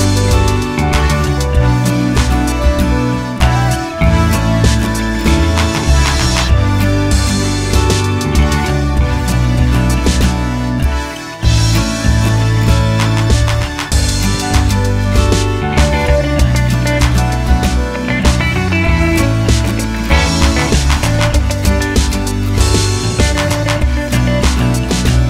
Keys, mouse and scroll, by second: 0.3-2.2 middle drag, 2.2 shift+click, 2.6 s, 3.8 g, 4.9 click, 5.0 s, 5.3 click, 5.4-6.8 middle drag, 5.8 scroll up 1, 6.1 scroll down 1, 7.3-10.7 shift+middle drag, 9.2 1, 10.7 click, 11.3 g, 12.2 click, 12.2-18.1 middle drag, 13.7 t, 13.8 z, 16.3-16.8 scroll down 2, 16.8 g, 18.1 click, 19.2-21.2 middle drag, 19.2 scroll up 2, 22.1 middle click, 22.6 click, 22.9 shift+click, 23.4 g, 24.5-25.2 middle drag.